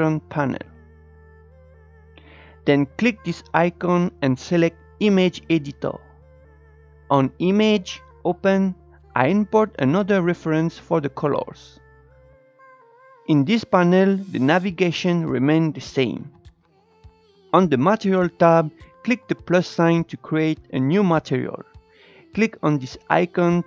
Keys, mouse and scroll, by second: 7.4-9.1 drag, 12.7-13.3 scroll down 1, 13.3-16.6 shift+middle drag, 16.6-17.0 scroll up 3, 17.0 shift+middle click, 17.1 click, 18.6-23.6 drag.